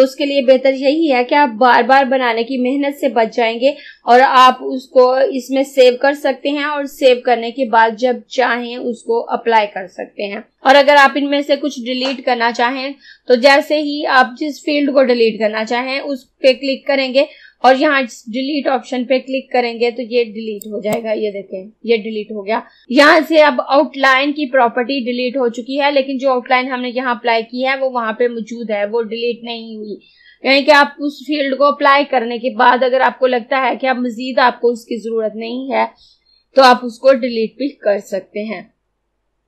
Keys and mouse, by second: 20.6-22.8 drag.